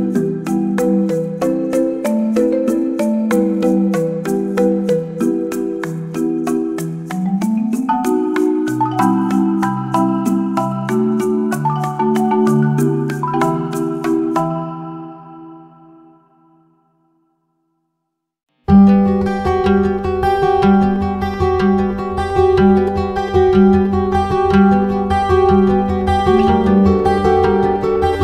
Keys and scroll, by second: 1.9 ctrl+z, 3.4 ctrl+z, 8.9 ctrl+j, 13.5-14.2 typing.